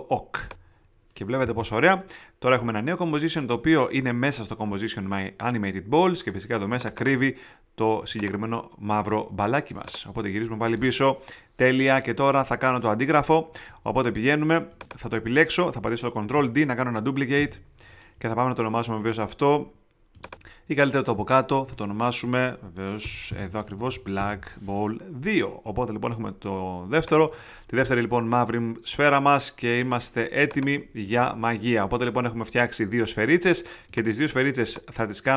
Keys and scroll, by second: 17.3 super+d, 21.6 Return, 22.6 Escape, 23.0 Return, 23.2 Right, 23.6 BackSpace, 23.8 2, 24.1 Return.